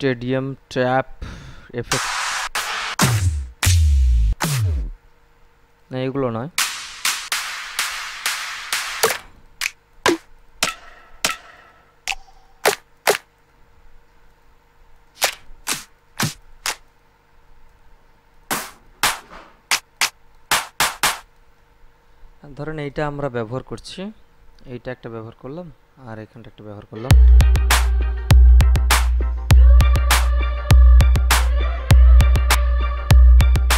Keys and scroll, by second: 27.1 space.